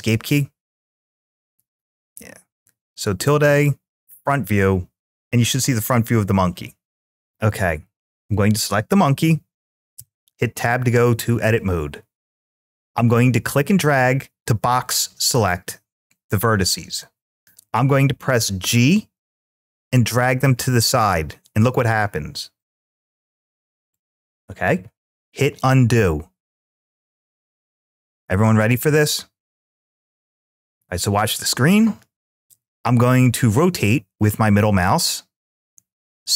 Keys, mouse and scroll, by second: 2.4 `, 7.0 click, 9.8 Tab, 12.7-14.6 drag, 19.9 g, 23.7 click, 27.2 ctrl+z, 32.9-36.3 middle drag.